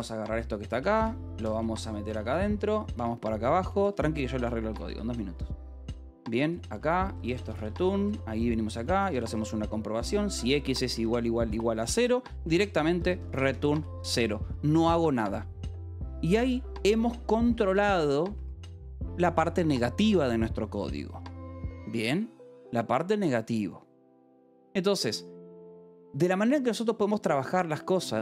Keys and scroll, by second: 0.0-1.2 typing, 1.8 Escape, 2.3 a, 2.5 Return, 2.9 Escape, 3.4-11.7 typing, 4.6 Return, 5.0 Escape, 12.8-15.0 typing, 16.3 j, 16.9 a, 17.1 Escape, 17.4 k, 19.3 shift+v, 24.6 Escape, 26.0 ctrl+s.